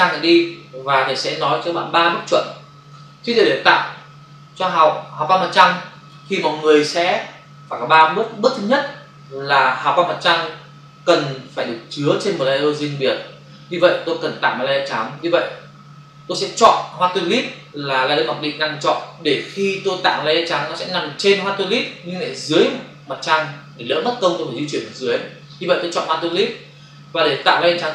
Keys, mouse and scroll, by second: 26.1 click.